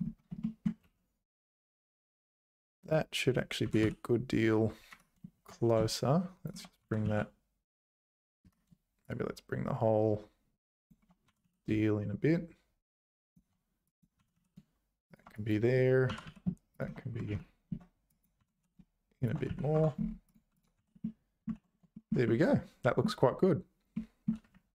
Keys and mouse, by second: 0.4 shift+middle click, 0.8 1, 2.0 click, 3.6 g, 5.9 shift+click, 6.8 g, 9.1-10.9 shift+drag, 11.2 g, 14.2 g, 15.3 click, 16.1 g, 17.3 ctrl+z, 18.1 click, 18.4 g, 19.5 z, 19.7 Tab, 20.3 click, 20.8 h, 21.0 middle click, 21.5 ctrl+s, 21.9 shift+middle click, 22.2 middle click, 23.9 middle click.